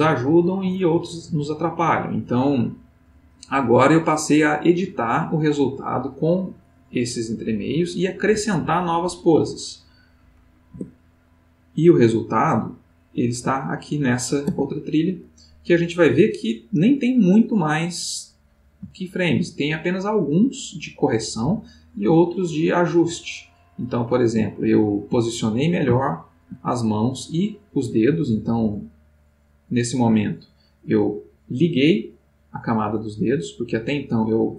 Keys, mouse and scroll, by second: 10.7 Tab, 11.8 click, 12.8 click, 14.5 Tab, 15.7-16.9 middle drag, 17.5 middle click, 18.9 ctrl+middle click, 20.0-23.9 drag, 24.5 ctrl+middle click, 25.9 shift+middle click, 26.8 shift+middle click, 27.9-30.5 drag, 31.9 click, 33.0 click, 33.7 click.